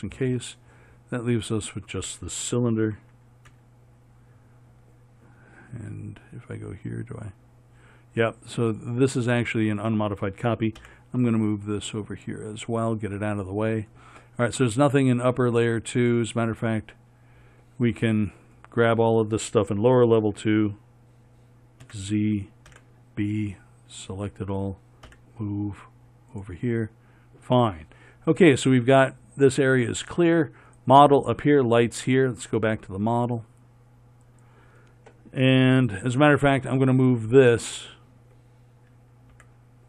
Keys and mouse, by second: 1.4-3.8 drag, 3.8 KP_1, 11.1 m, 22.1 z, 23.0 b, 25.4 m, 33.1-39.7 right drag, 39.7 m.